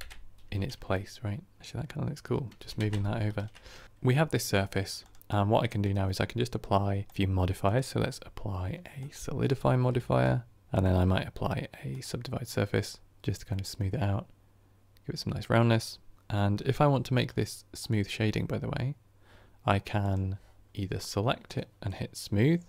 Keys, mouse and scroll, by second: 0.8-2.5 middle drag, 2.5 g, 3.8 shift+Tab, 3.8 Right, 7.0 click, 9.0-13.4 drag, 13.4-13.8 middle drag, 13.8-14.5 scroll up 3, 19.9 click, 21.4-22.6 right drag.